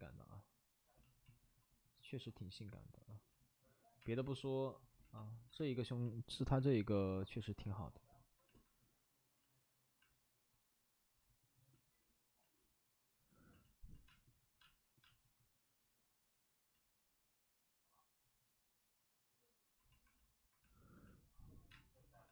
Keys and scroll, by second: 2.8 space, 4.0 space, 5.5 space, 9.3 ctrl+z, 14.0 space, 14.6 space, 15.1 space, 21.7 space.